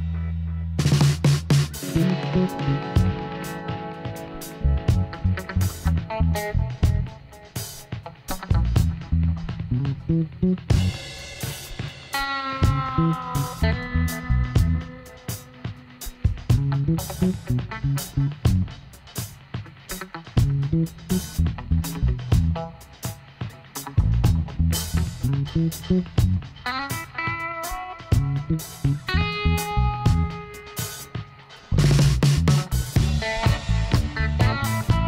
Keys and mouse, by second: 1.1 middle click, 5.0 click, 5.5 middle click, 6.7 click, 7.7-10.2 drag, 10.2-13.1 middle drag, 13.1 click, 13.2-15.0 middle drag, 14.0 l, 15.2 h, 15.6-17.3 middle drag, 18.4-21.3 middle drag, 19.0 click, 20.6 c, 29.6-31.5 drag, 30.3 x, 33.1-34.5 drag, 34.5 middle click.